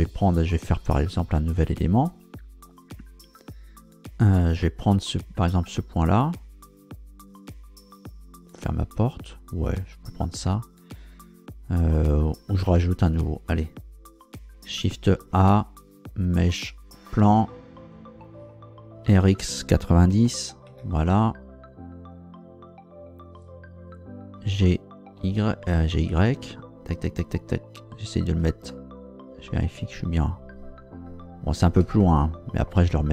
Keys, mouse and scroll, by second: 4.3 right click, 12.7 Tab, 15.2 shift+a, 17.0 click, 19.0 r, 19.2 x, 20.1 KP_9, 20.3 KP_0, 20.7 KP_Enter, 24.5 g, 25.2 y, 28.0 ctrl+click, 28.7-31.1 ctrl+middle drag, 31.3-31.7 scroll up 1, 32.0 shift+middle click.